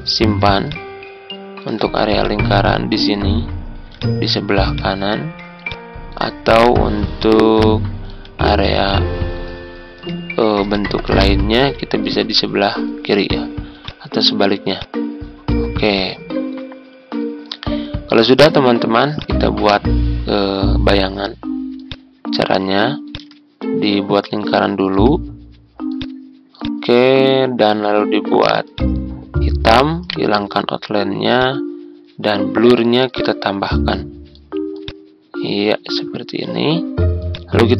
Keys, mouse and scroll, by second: 0.7 ctrl+click, 2.1-3.7 drag, 4.6 click, 8.5 click, 9.6 ctrl+scroll up 1, 10.7 ctrl+click, 12.0-13.6 drag, 15.9-24.6 drag, 24.7-27.6 drag, 30.0 right click, 31.3-36.6 drag.